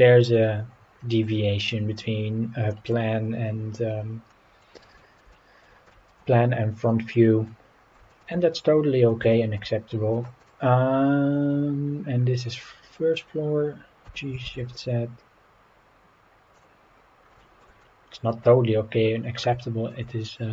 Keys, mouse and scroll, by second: 0.9 scroll down 2, 2.7 middle click, 3.6-4.1 scroll down 3, 4.3-4.6 middle drag, 5.0 shift+middle drag, 5.3-5.6 middle drag, 5.9 shift+middle click, 6.7 scroll down 1, 7.1-7.5 middle drag, 7.7 scroll down 1, 8.1 shift+middle click, 8.6-9.1 middle drag, 9.3 shift+middle drag, 9.9 middle drag, 10.4 click, 10.9-11.4 scroll up 3, 12.1-12.5 scroll down 4, 13.2 scroll up 2, 14.0 g, 14.4 shift+z, 16.5-16.9 drag, 16.9 scroll up 3, 17.4 shift+middle click, 17.8-18.3 middle drag, 19.6 shift+middle drag.